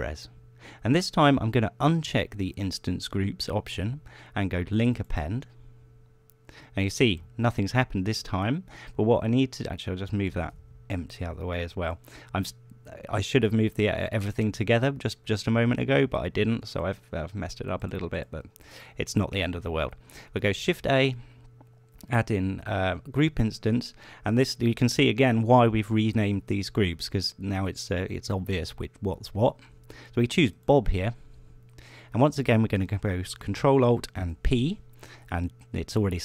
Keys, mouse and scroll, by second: 9.1 middle click, 10.8 g, 11.1 x, 16.9 click, 18.0 click, 18.8 click, 20.6 shift+a, 31.0 click, 32.1 middle click, 34.6 ctrl+alt+p.